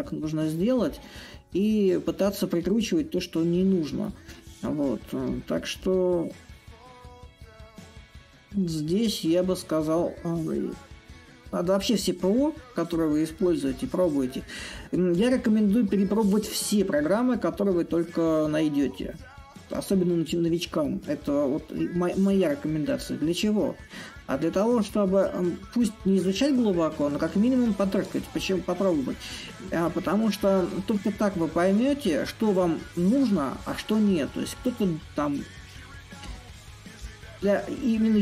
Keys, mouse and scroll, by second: 3.7-8.8 drag, 9.6-14.6 drag, 14.8-19.8 drag, 20.6-25.6 drag, 26.8-31.8 drag, 32.5-37.5 drag.